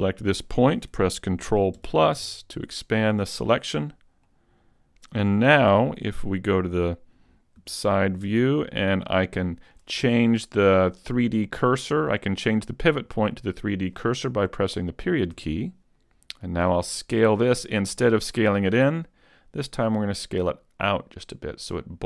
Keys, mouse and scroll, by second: 1.8 ctrl+KP_Add, 3.0 ctrl+KP_Add, 4.3 middle click, 5.9 KP_3, 7.6 KP_5, 8.4 z, 8.8-9.3 scroll up 2, 9.3 shift+middle click, 15.3 ., 16.9 click.